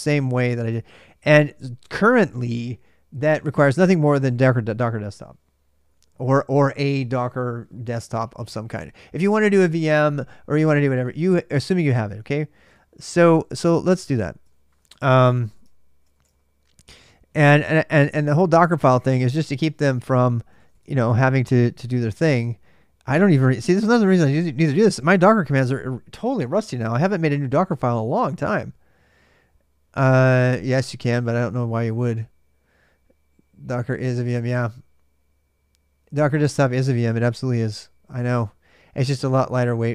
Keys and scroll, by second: 12.6-16.4 typing, 14.7 ctrl+c, 17.3 ctrl+a, 17.4 ctrl+a, 18.2-24.5 typing, 19.4 Return.